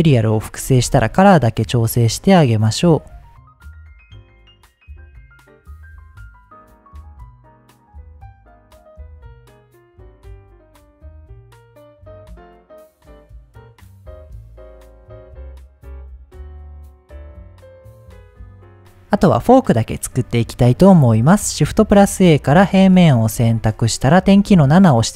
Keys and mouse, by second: 0.3 middle click, 3.1 right click, 3.5-5.1 right drag, 5.1 middle click, 5.7-6.8 drag, 7.1 click, 8.0 middle click, 8.5 middle click, 9.0 click, 9.7 click, 10.4 click, 11.5 shift+middle click, 11.6 ctrl+z, 12.0-12.6 drag, 15.0 ctrl+s, 15.3 click, 15.6 click, 21.1 shift+a, 22.7 g, 22.9 z, 23.3 drag, 24.4 KP_7.